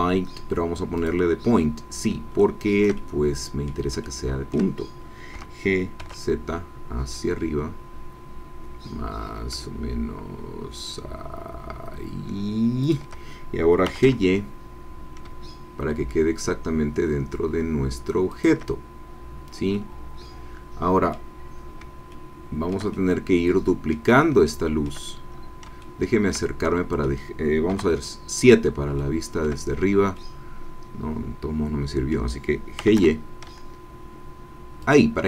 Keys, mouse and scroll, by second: 0.9 click, 2.3-3.9 shift+middle drag, 4.0 shift+middle click, 5.3 g, 6.0 z, 12.8 shift+click, 13.8 g, 14.0 y, 18.3 shift+click, 19.7-21.3 drag, 22.1 shift+middle click, 22.9 shift+click, 23.5 middle click, 24.5 shift+click, 25.2 shift+middle click, 25.4-25.7 scroll up 2, 25.8 shift+middle click, 26.6 shift+middle click, 27.7 KP_7, 28.9 shift+middle click, 30.2-32.3 middle drag, 32.8 g, 33.0 y, 34.8 shift+click.